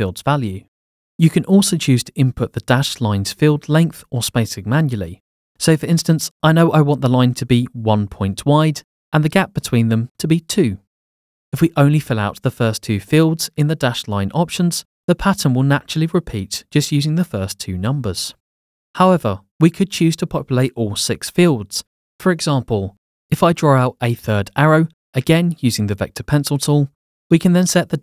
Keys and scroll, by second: 7.8 1, 8.1 Tab, 8.4 2, 9.5 Tab.